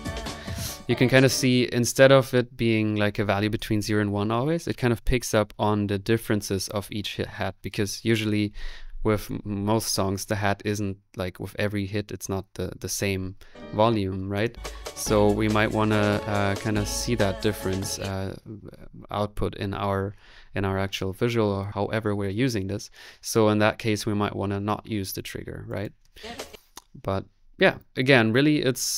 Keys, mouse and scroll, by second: 0.1 click, 0.3 click, 0.3 middle click, 14.0 2, 14.3-16.4 drag, 17.9 space.